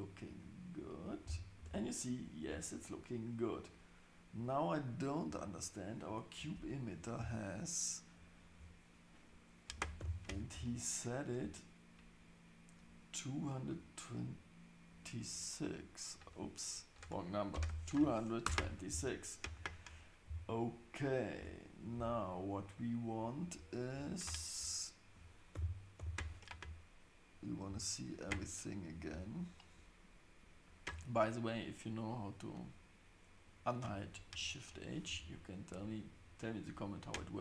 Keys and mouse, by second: 1.6 Tab, 10.0 shift+h, 16.1-19.0 drag, 17.7 KP_2, 21.4 Tab, 21.9 Tab, 25.5 shift+h, 27.5 click, 28.0 click, 28.9 click, 29.4 click.